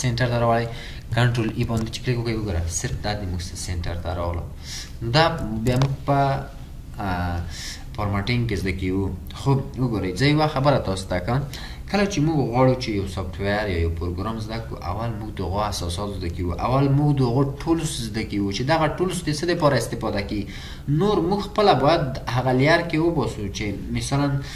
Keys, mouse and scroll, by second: 1.7 ctrl+e, 4.0-5.6 scroll up 1, 6.1 ctrl+z.